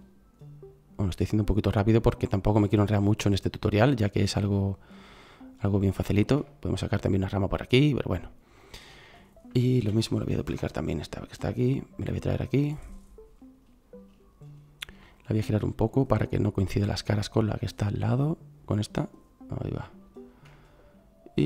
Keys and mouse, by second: 4.9 middle click, 5.1 middle click, 5.5-5.9 middle drag, 7.8 middle click, 9.9 shift+d, 16.0-18.6 drag.